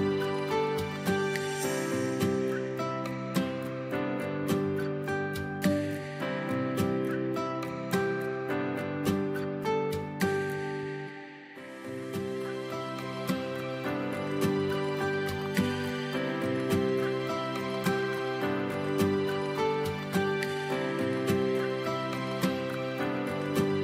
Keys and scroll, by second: 11.3 v, 13.6 space, 16.9 ctrl+x, 17.9 ctrl+b.